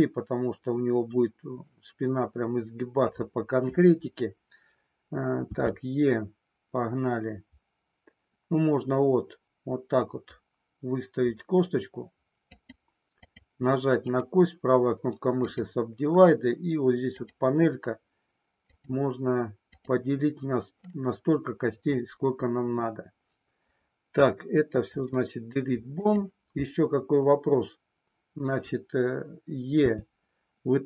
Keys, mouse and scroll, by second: 5.5 e, 12.7 click, 13.1 click, 18.7 click, 19.8 click, 24.8 Delete, 29.8 e.